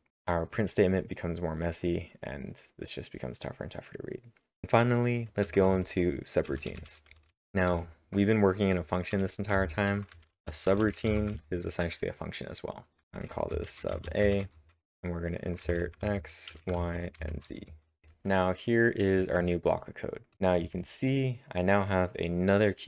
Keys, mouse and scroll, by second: 4.6 scroll down 1, 4.6-9.1 typing, 5.4 scroll up 1, 9.5 Return, 10.8-11.6 typing, 13.4-19.1 typing, 20.3-21.0 typing.